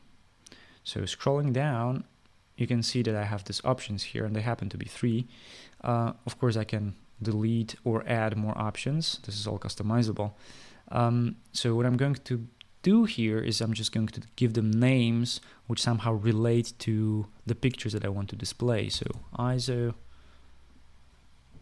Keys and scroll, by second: 19.3-20.3 typing.